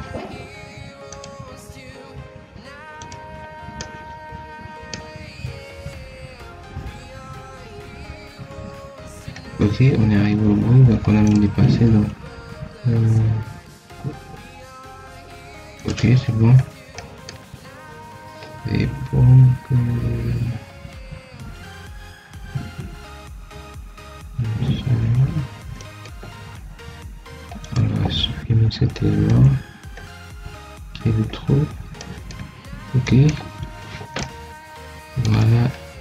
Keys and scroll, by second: 9.6 Escape, 29.2 ctrl+x.